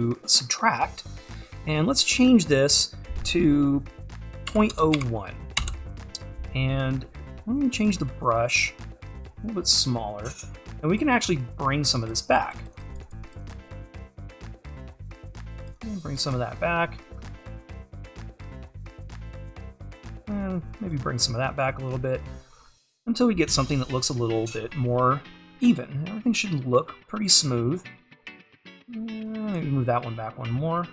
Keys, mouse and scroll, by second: 0.8-7.1 drag, 7.1-8.7 scroll up 2, 8.7-14.6 drag, 14.6-15.5 scroll up 2, 15.5-17.2 drag, 17.2-17.9 scroll up 2, 17.9-20.2 drag, 20.2-20.6 scroll up 2, 20.6-22.6 drag, 22.6-24.6 scroll down 2, 24.6-26.1 scroll up 2, 26.1-26.9 scroll up 1, 29.3-30.8 drag, 30.8 scroll down 1.